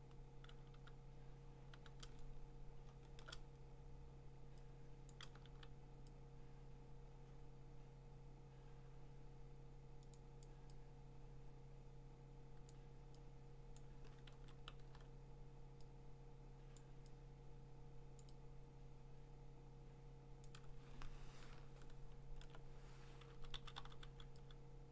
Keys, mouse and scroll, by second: 0.0-1.7 typing, 2.2-3.2 scroll, 5.1 click, 5.4 x, 10.1 right click, 10.4 click, 12.7 click, 13.8 click, 14.3 ctrl+z, 14.8 x, 16.8 click, 18.2 click, 20.4 click, 21.0-21.6 alt+scroll, 22.1 scroll, 23.3 [, 23.5 [, 23.8 [, 24.0 [.